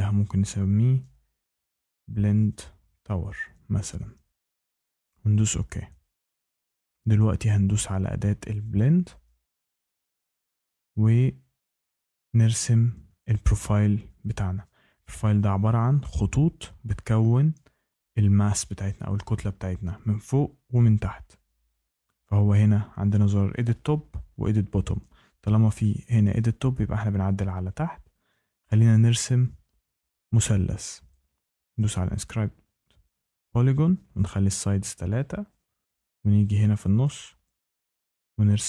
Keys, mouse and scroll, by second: 0.7-3.9 typing, 5.0 click, 8.7 click, 31.7 click, 34.5 click, 37.0 click.